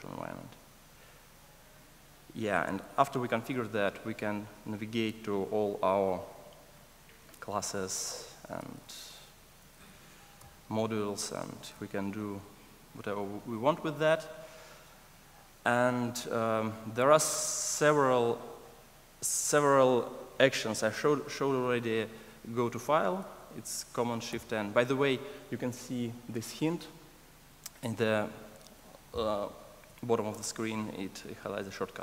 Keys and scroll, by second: 8.0 super+b, 8.7 alt+super+[, 10.3 super+b, 13.3 alt+super+[, 24.3 ctrl+shift+super+o, 30.3 ctrl+shift+super+o.